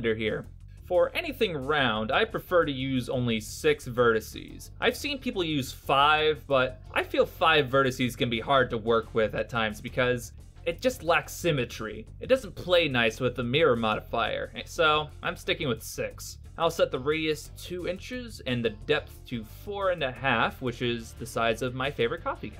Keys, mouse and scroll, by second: 4.7 click, 6.1 BackSpace, 13.8 click, 17.4 click.